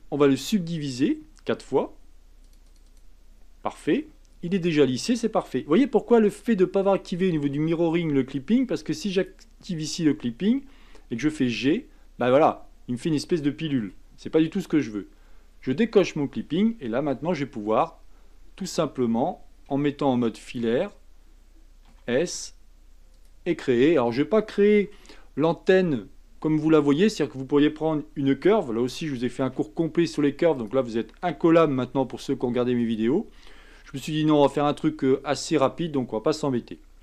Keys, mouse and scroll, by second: 2.5-4.0 drag, 4.4-5.3 scroll down 4, 5.3-5.9 scroll down 1, 5.9-7.6 scroll down 1, 9.1 click, 11.3 g, 15.9 click, 17.1 g, 19.7 z, 21.9 s, 23.5-24.8 scroll up 5, 24.8 g, 29.4 s, 31.6 s, 33.7 g.